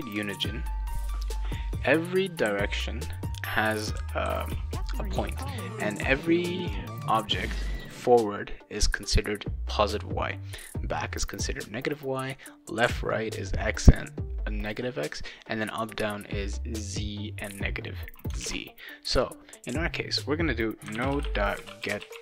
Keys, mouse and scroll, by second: 1.5 right click, 2.4 d, 3.7-5.1 typing, 5.1 right click, 18.4 alt+Tab, 20.6-22.2 typing.